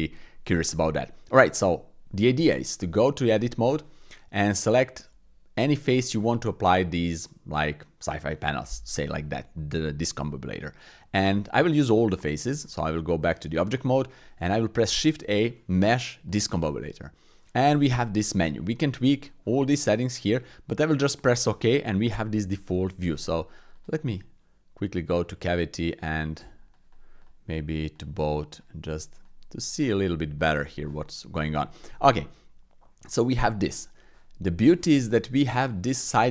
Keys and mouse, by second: 2.4 click, 2.9 Tab, 4.3-5.7 drag, 9.0 click, 11.4 middle click, 12.4 Tab, 12.8 middle click, 14.9 shift+a, 22.5 click, 23.7-30.8 drag, 32.2-32.9 drag, 32.9 middle click, 35.6 click.